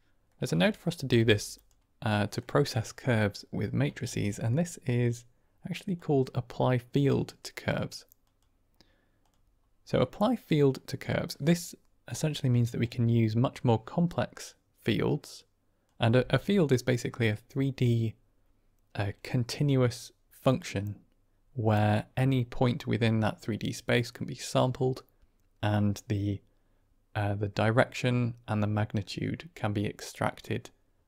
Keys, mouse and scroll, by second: 0.5-0.9 drag, 1.1 g, 2.1 middle click, 3.9 shift+a, 10.0 middle click, 12.7-15.9 drag.